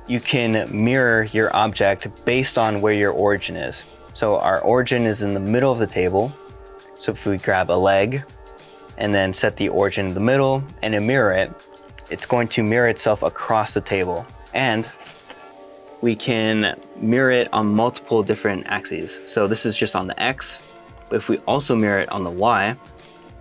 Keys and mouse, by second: 16.3 middle click, 18.3 middle click, 19.6 middle click, 22.4 click, 23.0 middle click.